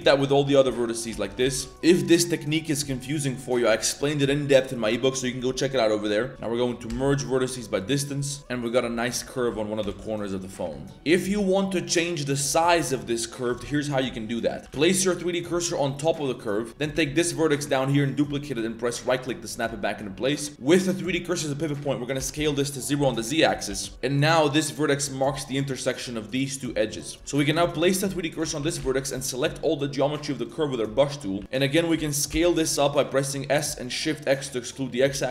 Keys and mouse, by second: 0.9 click, 1.1 shift+s, 1.3 a, 1.4 a, 1.5 b, 1.7-2.6 middle drag, 2.8 middle click, 3.9 ctrl+middle click, 4.4 z, 6.3 a, 6.8 m, 8.1 click, 8.5 Tab, 8.6 drag, 9.0 Tab, 9.2-11.3 typing, 12.4 z, 12.7 a, 12.9 a, 14.6 click, 14.6 z, 14.7 shift+s, 15.4 z, 17.2 shift+d, 22.1 s, 23.7 z, 27.3 click, 27.6-28.8 typing, 31.3 s, 31.4 z, 31.5 middle click, 31.9 s.